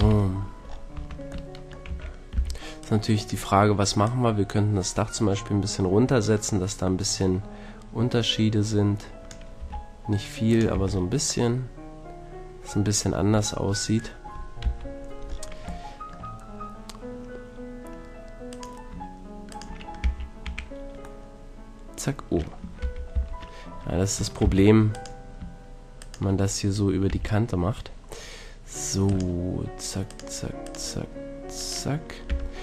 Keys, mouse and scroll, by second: 0.0 KP_3, 0.9 Tab, 1.9 a, 2.3 b, 4.1-6.1 drag, 9.6 r, 10.6-13.1 drag, 10.7 a, 13.1-14.3 middle drag, 14.7 KP_3, 20.1-20.5 typing, 20.5 click, 22.8 ctrl+z, 23.1 ctrl+z, 24.4 c, 26.0-27.5 drag, 27.1 f, 29.1-31.9 drag, 32.3 f.